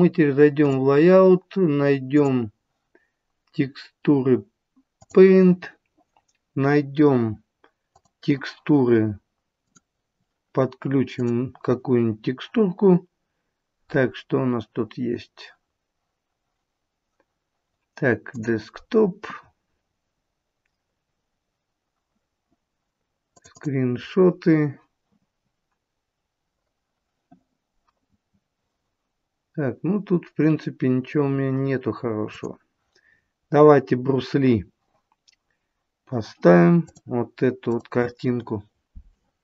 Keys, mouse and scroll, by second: 0.7 click, 2.1 click, 7.9 click, 9.6 click, 11.2 click.